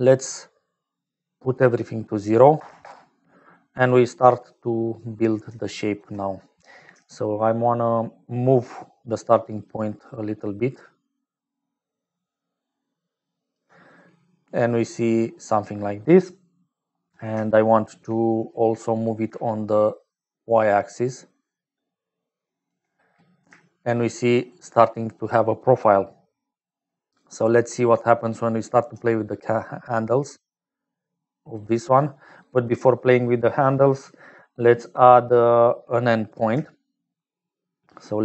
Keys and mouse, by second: 1.0-3.3 drag, 4.6 click, 5.6 shift+click, 10.1-13.6 shift+drag, 14.3 click, 18.4 click, 19.9-22.6 shift+drag, 23.4 shift+click, 24.3 click, 26.4 click, 29.6-32.7 shift+drag, 34.4-35.7 drag.